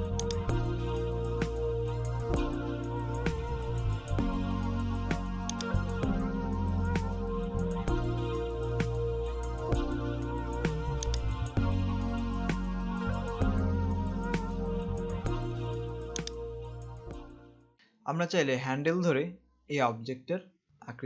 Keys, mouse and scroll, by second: 0.4 click, 0.7 space, 1.8 scroll up 1, 5.5 click, 11.2 click, 13.5 click, 16.4 click.